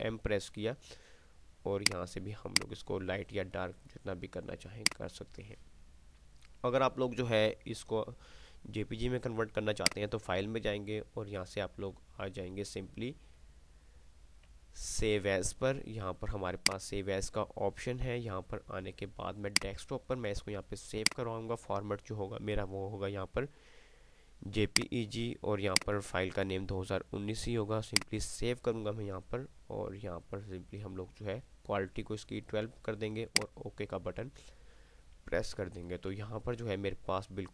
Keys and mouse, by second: 0.0 ctrl+m, 2.3-3.7 drag, 10.0 click, 16.8 click, 19.3 click, 23.7 typing, 24.8 click, 24.8 typing, 26.5 typing, 36.8-37.5 typing.